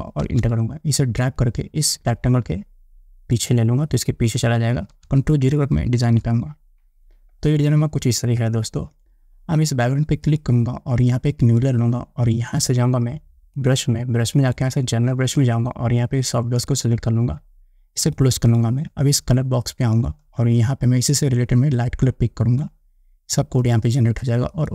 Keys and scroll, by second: 0.5 Return, 6.1 ctrl+0, 12.3 ctrl+0.